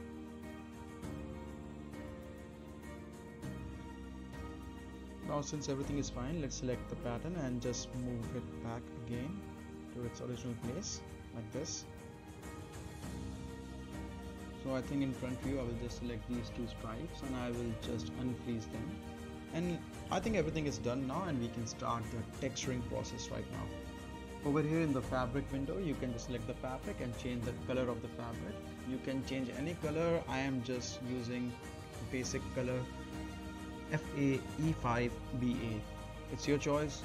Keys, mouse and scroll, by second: 4.7 space, 6.8 right click, 7.3 click, 7.7 shift+click, 8.0-8.3 middle click, 8.6 shift+click, 8.8-9.7 right click, 9.1 click, 9.3 right click, 9.5 middle click, 9.7 scroll down 1, 9.8 right click, 10.3-12.2 drag, 12.2-12.5 right click, 12.5 middle click, 13.2-14.4 click, 13.7 right click, 14.3 space, 15.2 click, 17.0 right click, 18.4 click, 19.9-20.4 scroll up 1, 20.4-21.1 right click, 21.2 middle click, 21.5-21.8 scroll down 1, 21.8-22.4 middle click, 22.7-23.4 scroll up 1, 23.4 middle click, 24.0 click, 27.4 click, 30.5-36.0 drag.